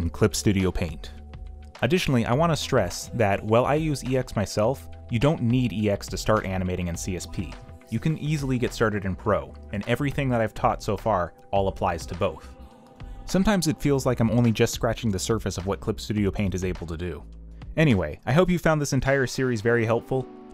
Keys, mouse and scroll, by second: 0.3 space, 0.7 ctrl+z, 1.4 space, 1.6 ., 2.5 space, 3.2 alt+Delete, 3.5-7.9 typing, 9.0 space, 11.1 space, 13.0 y, 14.2-18.4 typing, 18.4 ctrl+z, 19.5 ctrl+z.